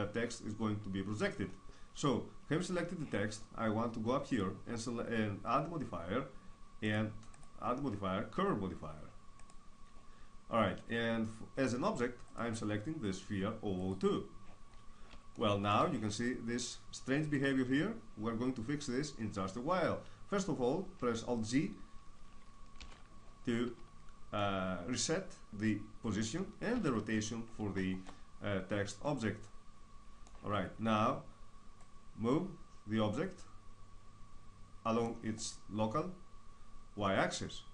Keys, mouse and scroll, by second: 1.3 middle click, 3.9-6.0 drag, 6.4-9.1 drag, 11.9-13.8 drag, 14.3-17.7 middle drag, 17.7 scroll up 1, 22.4 alt+g, 24.0-25.5 middle drag, 26.4 alt+r, 26.8-30.5 middle drag, 31.5-33.3 drag, 35.0-36.8 middle drag.